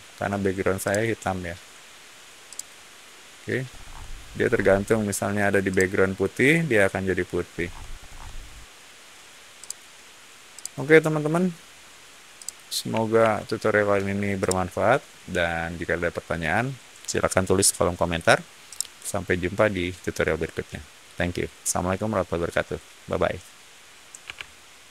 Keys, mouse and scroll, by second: 0.8 click, 2.4 click, 3.6 middle click, 4.3 middle click, 5.6-6.1 drag, 7.4 middle click, 7.9-9.5 middle drag, 9.5 click, 10.5 click, 12.3 click, 13.1 alt+Tab, 14.3-16.8 middle drag, 18.6-22.3 middle drag.